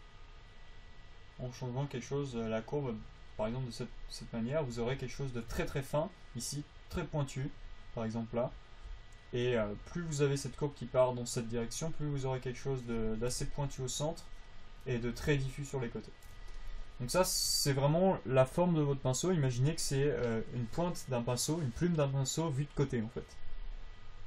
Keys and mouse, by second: 6.9-16.0 drag.